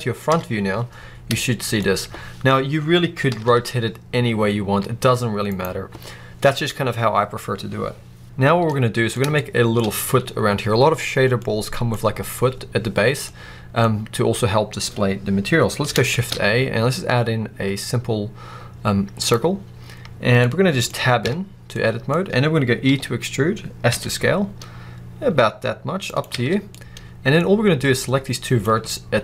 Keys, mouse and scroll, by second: 0.2 KP_1, 0.9-1.3 scroll up 2, 1.8-3.2 scroll up 2, 3.2 r, 5.5 right click, 8.5-21.1 middle drag, 9.7-11.4 scroll up 2, 16.0 shift+a, 19.4-20.4 scroll down 2, 21.1 Tab, 22.0-22.7 scroll up 2, 22.7 e, 26.1 click, 26.2 alt+a, 26.6 middle click, 27.3-27.9 scroll up 2, 27.9 click, 28.6 scroll up 2, 28.8 middle click.